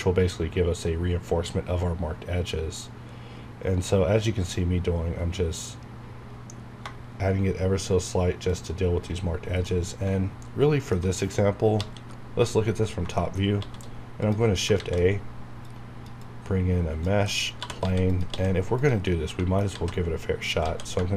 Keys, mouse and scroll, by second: 6.8 Caps_Lock, 8.5 shift+click, 8.9 scroll down 1, 9.6-11.0 middle drag, 11.0-11.8 alt+scroll down 2, 11.8 KP_7, 12.7-13.0 scroll up 1, 13.1 middle click, 13.4 shift+scroll up 1, 13.6 shift+s, 14.2 click, 14.7 shift+a, 15.6-17.2 drag, 17.3-18.8 typing, 18.1 click, 18.8 click, 19.0 middle click, 19.7 alt+z, 20.6 alt+x.